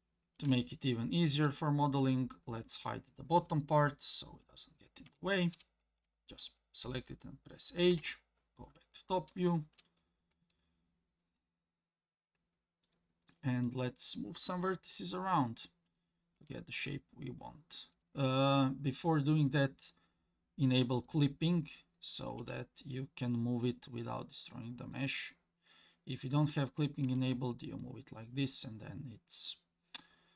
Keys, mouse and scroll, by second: 0.0 scroll down 2, 0.6 shift+middle click, 1.2 shift+middle click, 2.1 click, 5.1 h, 7.9 KP_7, 8.7-10.9 scroll up 4, 12.6-13.6 scroll up 1, 13.6 click, 16.0 click, 16.4 g, 21.0 click, 22.4 g, 26.3 click, 27.0 g.